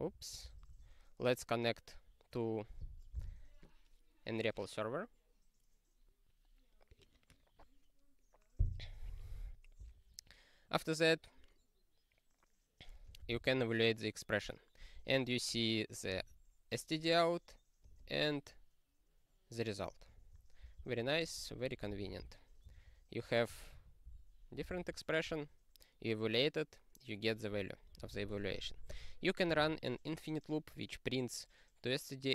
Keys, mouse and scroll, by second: 0.7 ctrl+s, 13.3 ctrl+e, 17.9 click, 18.0 click, 20.1 click, 20.6 Return, 20.8 ctrl+p, 21.3-22.7 typing, 22.7 ctrl+o, 23.7 ctrl+/, 24.0 ctrl+n, 24.7 ctrl+e, 27.9 ctrl+n, 28.1 ctrl+n, 28.2 ctrl+n, 28.3 ctrl+n, 28.5 ctrl+n, 28.6 ctrl+n, 28.8 ctrl+n, 28.8 ctrl+n, 28.9 ctrl+n, 29.7 ctrl+e.